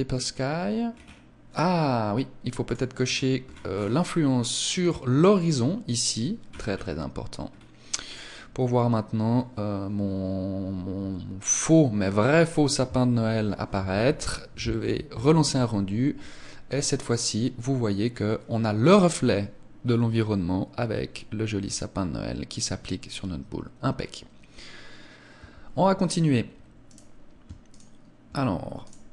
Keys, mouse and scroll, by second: 0.6-1.2 scroll down 5, 1.4 scroll up 1, 2.6 click, 3.4 scroll down 7, 4.1 scroll down 8, 4.7 click, 6.5-6.8 scroll up 7, 7.4-8.0 scroll up 2, 8.0 click, 8.0-9.0 scroll up 2, 13.9 ctrl+s, 25.3 Escape, 26.9 right click, 27.7 shift+right click, 28.9 right click.